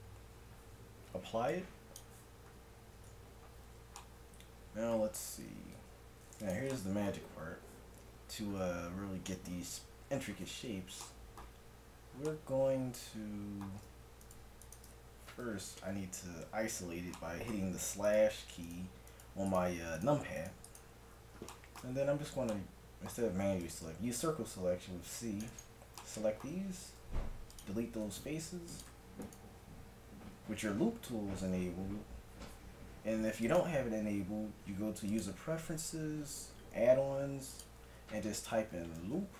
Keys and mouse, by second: 1.5-4.1 drag, 3.0 Tab, 5.3 a, 5.8 ctrl+Tab, 14.3-16.4 right drag, 15.5 KP_Divide, 18.1 right click, 19.5-21.5 right drag, 22.2 middle click, 23.3 c, 26.9 x, 28.0 ctrl+Tab, 30.3 w, 33.4-35.3 drag.